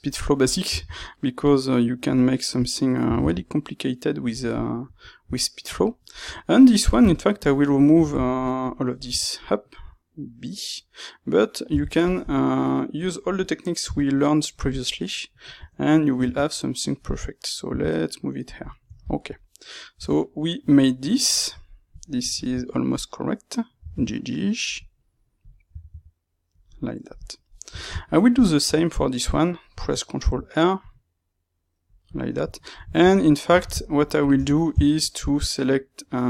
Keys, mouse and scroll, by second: 0.4 click, 0.6 g, 2.5 click, 3.0 g, 4.5-7.3 middle drag, 6.2 Tab, 7.3 click, 7.6-18.4 middle drag, 9.1 Tab, 12.9 b, 15.5 Tab, 17.1 space, 18.4 click, 18.7-22.9 shift+middle drag, 19.9 Tab, 22.9 click, 23.7 g, 25.3 click, 25.6 g, 26.5 click, 27.1 click, 27.4-35.0 ctrl+middle drag, 30.1 ctrl+r, 34.3 Tab, 35.0 shift+click.